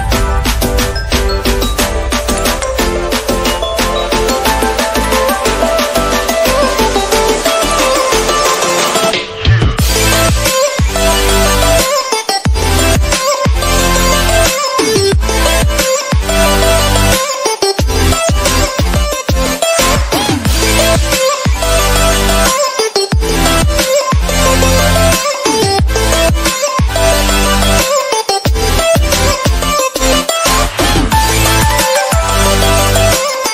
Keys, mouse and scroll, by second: 5.8 space, 5.8-13.1 drag, 13.1-14.3 typing, 13.1 click, 13.9 click, 14.4-15.7 drag, 16.0 space, 16.2 ctrl+click, 17.1 space, 17.3 [, 17.5 click, 17.9 space, 18.0 click, 18.7 space, 18.8 click, 19.7 space, 19.7 click, 19.9-22.0 drag, 22.0 space, 22.0 click, 22.2 ], 22.4-24.1 drag, 24.3-25.1 typing, 24.4 ctrl+click, 27.1 space, 27.1-30.3 drag, 30.3-33.5 typing, 30.4 click, 30.9 alt+click, 31.4 click, 32.4 click, 32.6 click, 32.9 click, 33.4 click.